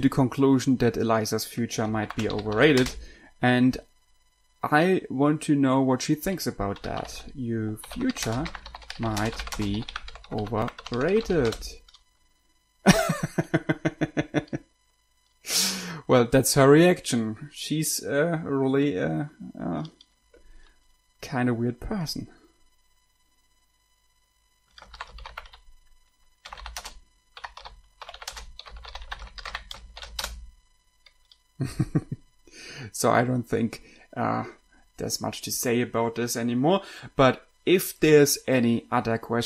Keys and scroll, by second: 2.1-3.4 typing, 6.9-12.0 typing, 25.0-30.7 typing.